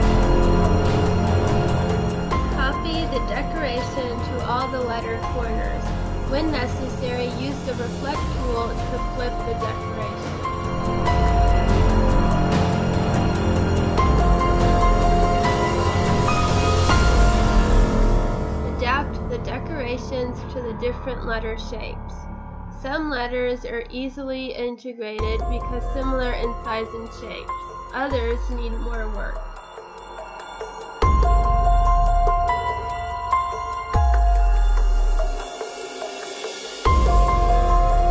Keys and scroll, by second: 7.4 space, 8.2 space, 8.9 space, 17.0 Delete, 18.8 Right, 19.4 Left, 27.9 Delete, 33.0 space.